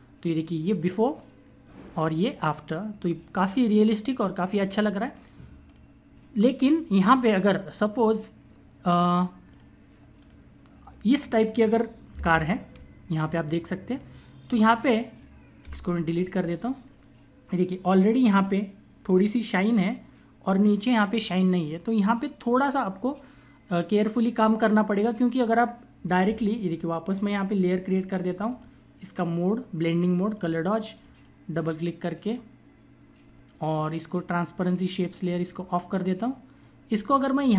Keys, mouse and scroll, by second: 0.8 click, 5.0 click, 7.9 click, 26.1 ], 27.4 click, 34.9 click, 36.9-37.5 typing.